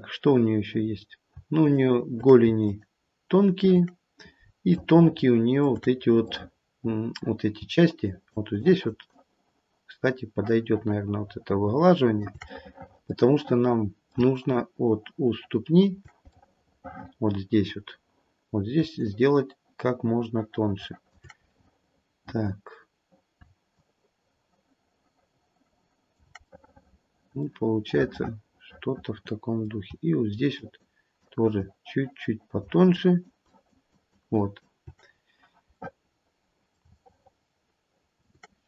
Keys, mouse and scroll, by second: 0.8-1.2 scroll down 2, 1.6 shift+click, 2.7 shift+click, 3.3 shift+click, 4.7 shift+middle click, 5.8-7.5 scroll up 4, 6.2 middle click, 8.6 shift+click, 9.1 shift+click, 13.4 middle click, 14.4 middle click, 14.4 shift+click, 16.2 middle click, 17.3 middle click, 17.8 middle click, 17.8 scroll down 2, 19.0 shift+click, 21.7 middle click, 22.4 middle click, 23.7 shift+click, 27.9 middle click, 29.1 middle click, 29.8 middle click, 30.5 shift+click, 31.1 shift+click, 31.6 shift+click, 32.9 shift+click, 33.4 shift+click, 33.8 shift+click, 34.3 shift+click, 35.0-35.7 scroll down 1, 35.7 middle click, 35.7-36.7 scroll down 1, 36.7 middle click, 37.0 shift+middle click, 38.1 middle click.